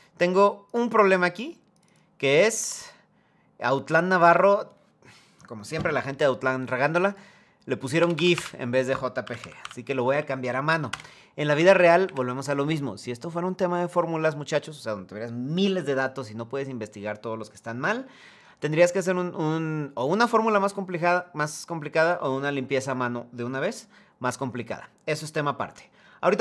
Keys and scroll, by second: 7.7 BackSpace, 8.0 BackSpace, 10.6 Return, 11.2 Up, 11.3 Right, 11.7 Right.